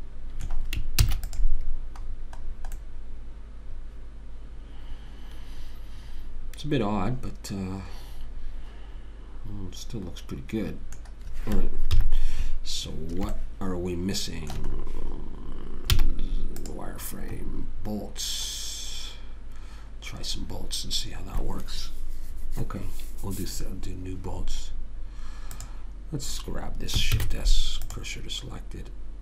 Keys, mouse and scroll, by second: 1.4 ctrl+s, 12.3 KP_3, 13.7 middle click, 16.3 z, 25.9 click, 27.5 shift+s.